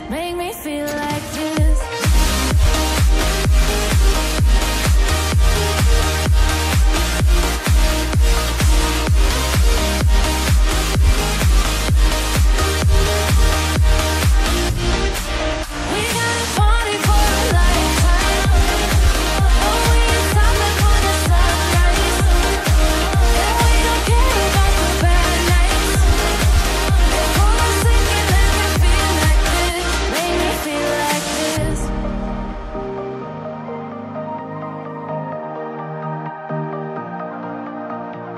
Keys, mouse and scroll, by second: 0.0-0.9 typing, 1.6 click, 5.0-5.8 scroll up 1, 5.8 click, 7.0-7.4 scroll down 1, 7.5-8.3 scroll up 1, 8.3 click, 11.1 shift+click, 20.2-22.2 scroll down 1, 24.5 click, 25.2 ctrl+v, 25.5-26.3 typing, 26.1 click, 28.0 click, 28.8-29.4 scroll up 1, 29.4 click, 29.5 double click, 29.6 ctrl+a, 30.2-31.7 typing, 33.5 click, 37.6 double click.